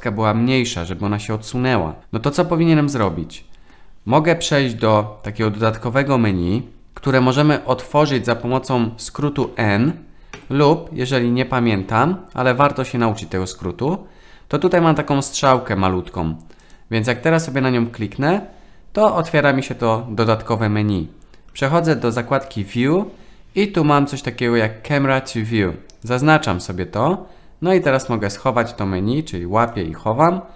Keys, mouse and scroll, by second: 3.1-3.7 middle drag, 9.5 n, 10.4 n, 16.6 click, 26.1 click, 28.8 click.